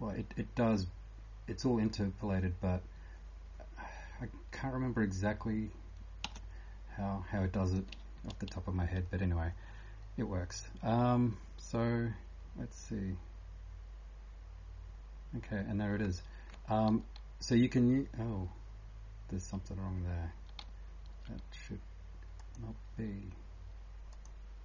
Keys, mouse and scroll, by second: 6.2 space, 7.6 click.